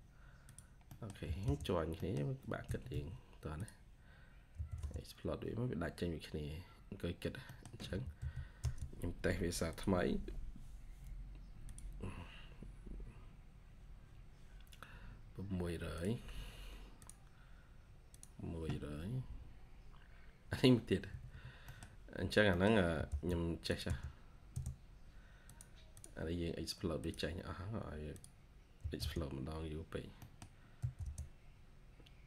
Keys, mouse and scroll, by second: 0.8 middle click, 0.9-1.8 typing, 1.8 middle click, 2.5 Escape, 2.6 scroll up 1, 2.8 Escape, 4.4 x, 5.2 scroll down 1, 5.4 scroll, 5.7 scroll down 1, 6.1 x, 6.4 scroll up 1, 6.6-7.3 scroll, 7.3 scroll up 1, 7.4 middle click, 7.7 t, 21.0 Escape, 21.1-21.6 scroll up 1, 21.6 middle click, 21.7-22.3 scroll down 1, 22.4 middle click, 22.8 typing, 25.8 double click, 28.7 typing, 30.1 middle click, 30.7 typing.